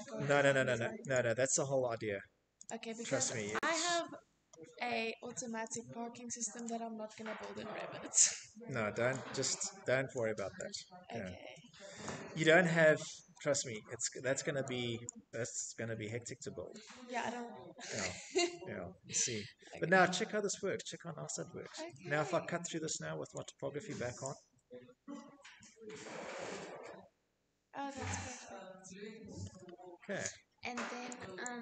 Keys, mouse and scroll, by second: 1.0 click, 1.8 click, 4.1 click, 4.9 click, 5.6 middle click, 5.7 middle click, 6.6 shift+middle click, 6.8 shift+middle click, 7.4 click, 8.9 click, 10.7 click, 12.1 middle click, 12.6 middle click, 13.3 click, 16.2 middle click, 17.0 middle click, 17.0 middle click, 17.5 scroll, 17.7 middle click, 18.0 middle click, 20.0 shift+middle click, 20.2 middle click, 20.3 middle click, 20.6 middle click, 22.5 click, 24.2 middle click, 27.7 shift+middle click, 28.0 middle click, 28.0 middle click, 28.1 middle click, 29.7 click, 31.4 middle click, 31.5 middle click.